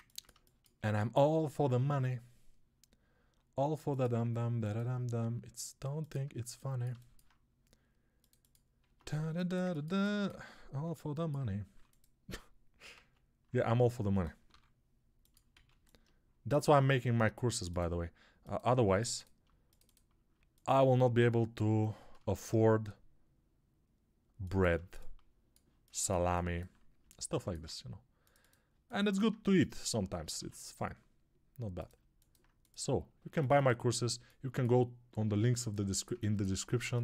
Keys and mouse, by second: 6.2-12.8 ctrl+alt+drag, 8.7 Tab, 11.6 3, 12.8 alt+z, 12.8-36.8 alt+middle drag, 14.4 i, 15.4 alt+z, 18.7 2, 22.3 shift+e, 30.2 ctrl+r, 36.8 click, 36.9-37.0 ctrl+middle drag.